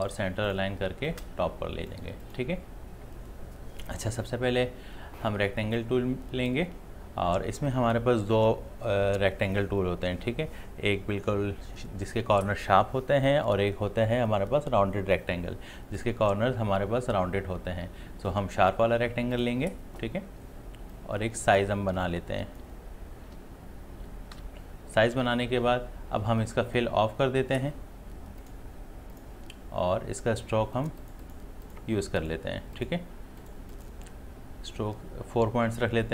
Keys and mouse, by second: 5.8-24.4 drag, 24.4 v, 28.4 click.